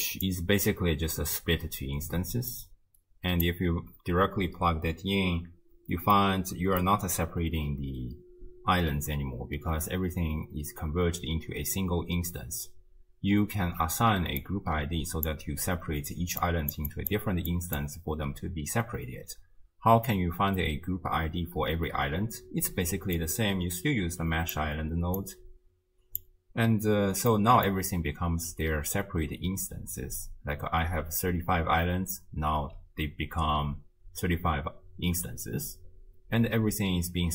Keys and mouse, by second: 2.5-3.6 drag, 6.3 middle click, 14.0 d, 14.4-16.2 drag, 15.3 d, 16.2 d, 16.4 click, 16.7 d, 16.8-19.1 d, 23.2-24.6 drag, 25.2-26.2 drag, 27.3-27.7 middle drag.